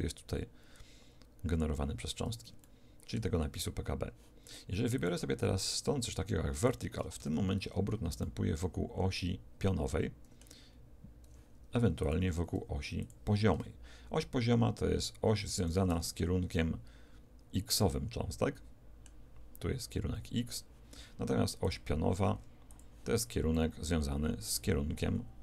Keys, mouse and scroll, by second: 2.5-4.9 middle drag, 4.9 click, 7.1 alt+a, 8.1-11.2 middle drag, 11.2 Escape, 11.9 click, 13.5 alt+a, 15.9 alt+a, 16.5-19.3 middle drag, 21.6 click, 23.5-25.4 middle drag.